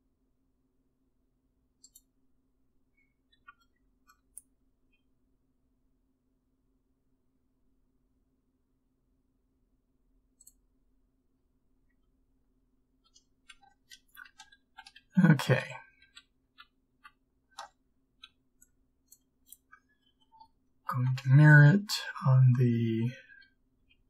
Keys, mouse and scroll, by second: 5.0 b, 5.0 g, 14.3 ctrl+z, 14.7 ctrl+z, 15.1 ctrl+z, 15.5 ctrl+z, 16.1 ctrl+z, 16.5 ctrl+z, 17.0 ctrl+z, 20.9 ctrl+m, 20.9 b.